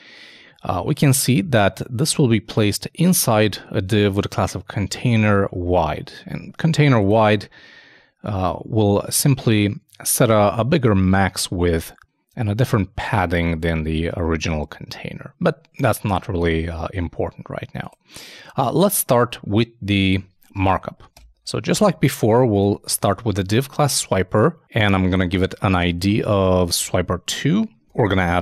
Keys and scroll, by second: 20.8 shift+super+Left, 21.1 shift+super+BackSpace, 23.9 typing.